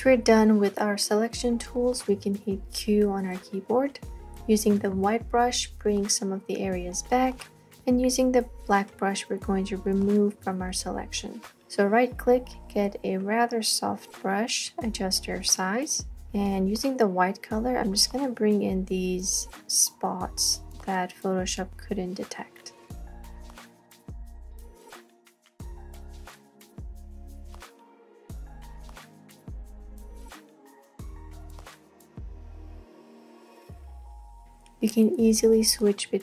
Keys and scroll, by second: 2.8 q, 4.7 b, 16.1 typing, 25.0 space, 25.2 space, 28.0 space, 29.9 x, 32.0 space, 32.4 space, 32.8 x.